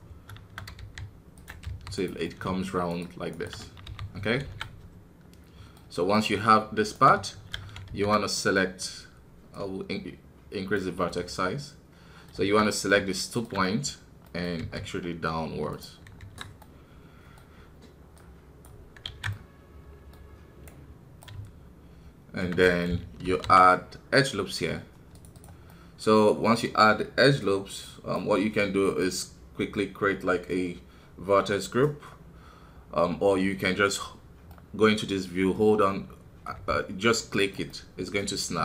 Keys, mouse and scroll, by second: 0.7 e, 2.2 middle click, 2.9 shift+right click, 3.8 f, 4.1 scroll down 1, 4.4 alt+a, 4.6-5.8 middle drag, 5.8 scroll up 1, 6.1-7.5 middle drag, 7.5 shift+z, 8.3-11.8 right drag, 11.8-13.3 middle drag, 13.3 shift+right click, 13.6 middle click, 14.6 e, 16.1 scroll down 1, 16.2 KP_1, 16.6-18.9 middle drag, 18.9 scroll up 1, 19.0 alt+a, 19.3-23.2 middle drag, 23.2 ctrl+r, 25.6-28.8 middle drag, 28.8-31.8 drag, 31.8-36.5 middle drag, 36.5 g, 37.6-38.6 middle drag.